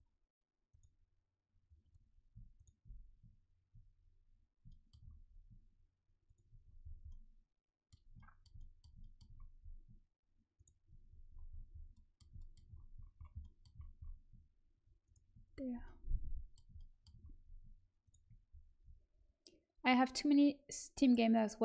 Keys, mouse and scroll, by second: 0.3 right click, 4.2 right click, 4.8 middle click, 6.2-12.9 middle drag, 6.2-8.1 right drag, 10.5-11.5 right drag, 11.2 click, 15.0-16.8 right drag, 18.0-21.6 right drag.